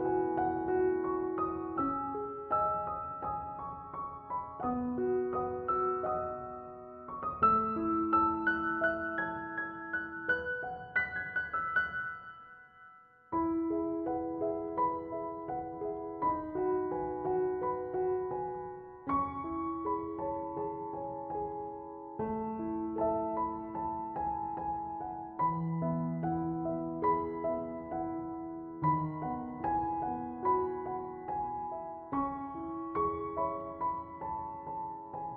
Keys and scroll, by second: 1.8-2.6 typing.